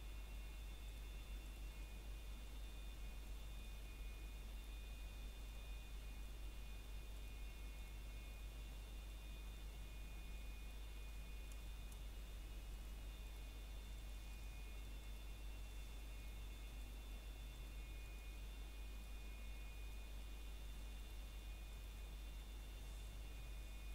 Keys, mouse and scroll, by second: 0.1 ctrl+click, 3.6 scroll down 1, 3.9 middle click, 5.0 shift+middle click, 5.8 click, 6.0 middle click, 6.3 typing, 6.6 ctrl+click, 9.8 middle click, 10.9 click, 12.3 middle click, 13.2 scroll up 1, 13.6 click, 16.9 scroll down 1, 17.1 middle click, 17.6 shift+middle click, 17.9 scroll up 1, 18.5 click, 19.0 ctrl+click, 21.9 ctrl+click.